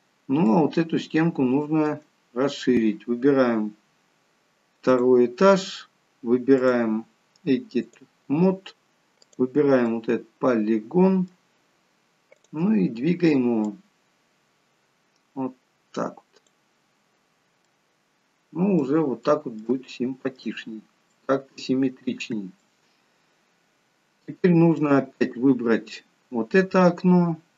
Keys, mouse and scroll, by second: 0.1 scroll up 1, 0.4 middle click, 4.8 click, 6.6 click, 9.8 middle click, 12.9 click, 13.6 click, 16.9-17.6 scroll down 3, 17.6 middle click, 19.2 middle click, 19.9 shift+middle click, 20.6-21.9 scroll down 2, 21.1 middle click, 22.8-23.8 scroll up 1, 24.8 middle click, 24.8-25.4 scroll up 1, 25.7-27.0 scroll down 1.